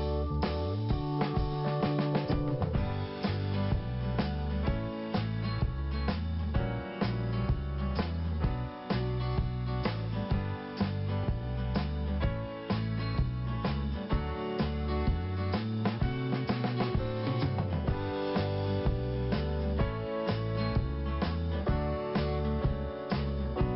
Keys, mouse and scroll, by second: 0.0 click, 2.5 click, 4.2 n, 5.3 scroll up 2, 7.0 click, 8.5 click, 8.6 click, 10.2 click, 12.0 click, 12.1 click, 13.0 click, 15.4 p, 16.5 click, 22.7-23.1 scroll up 2, 23.6 scroll down 1, 23.7 scroll up 1.